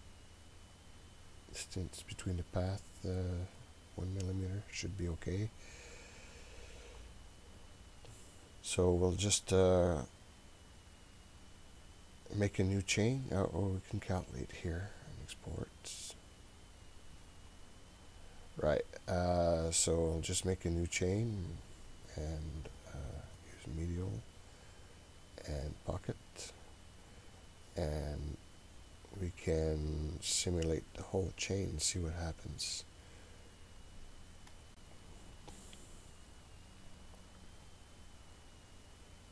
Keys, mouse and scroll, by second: 0.1-3.6 scroll down 3, 3.6-5.5 drag, 6.5-10.3 scroll up 9, 14.3-17.2 drag, 20.3 click, 21.3 click, 21.7 click, 23.4 click, 24.7 click, 25.7 click, 26.7 click, 34.6-39.3 drag.